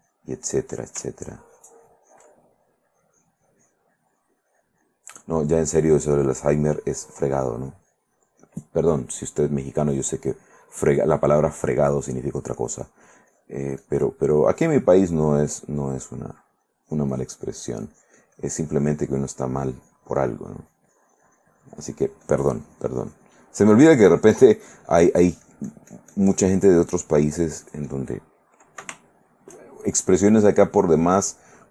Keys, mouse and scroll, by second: 1.3-2.5 ctrl+drag, 2.6-5.0 ctrl+drag, 5.5 middle click, 5.6 click, 6.2-8.9 drag, 9.3-11.8 drag, 12.3-28.3 drag, 29.2 shift+middle click, 30.5-31.7 drag.